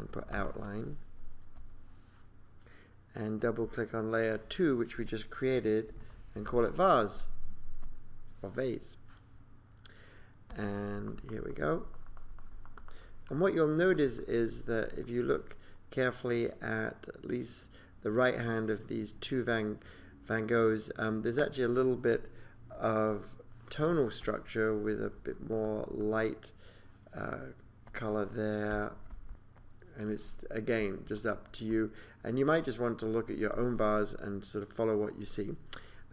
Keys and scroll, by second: 0.0-0.9 typing, 5.7-7.1 typing.